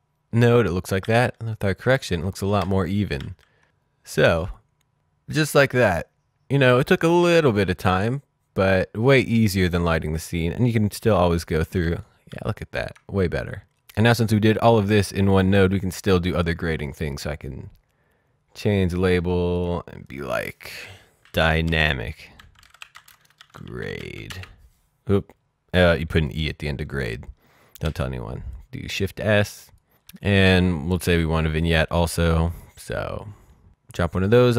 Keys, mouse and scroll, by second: 0.8 ctrl+d, 2.0 ctrl+d, 2.4 ctrl+d, 3.2 d, 3.6 click, 11.1 ctrl+d, 11.8 d, 12.2 d, 13.5 click, 16.3 right click, 18.8 click, 21.2-24.4 typing, 26.1 click, 27.8 shift+s, 28.5 click, 31.0 click, 33.4-33.8 scroll down 1, 33.8 click.